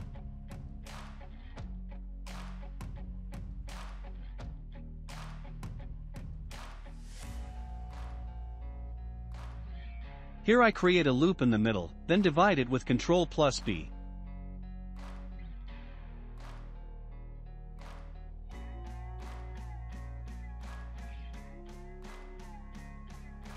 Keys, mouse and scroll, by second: 2.7 ctrl+r, 6.6-9.2 shift+middle drag, 9.2 ctrl+r, 12.5 alt+b, 14.2 ctrl+b, 17.6-23.5 shift+middle drag.